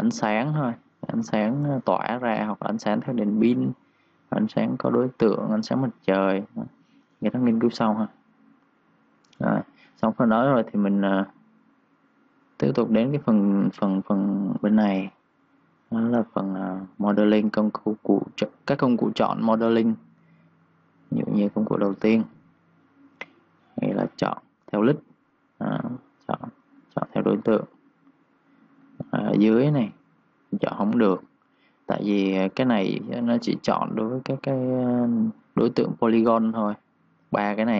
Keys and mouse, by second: 6.9-8.4 typing, 7.1 click, 8.1 click, 8.6 click, 15.6 click, 35.0-37.2 typing, 35.5 click, 35.9 click, 36.3 click, 37.5 click.